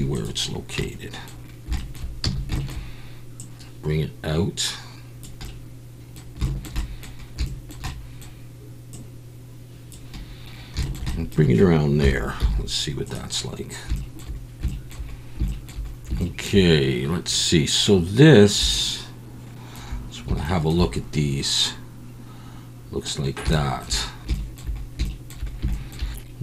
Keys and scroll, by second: 2.2 a, 12.0 KP_1, 12.4 z.